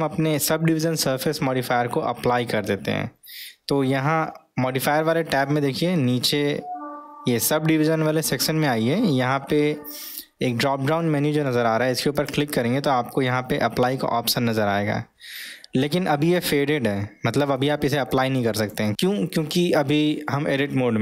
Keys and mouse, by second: 5.5 click, 12.3-21.0 drag.